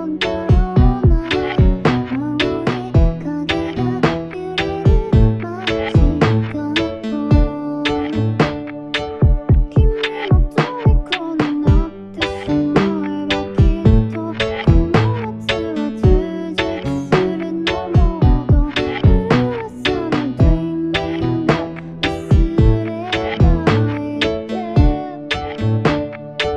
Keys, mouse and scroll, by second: 23.7-25.0 typing.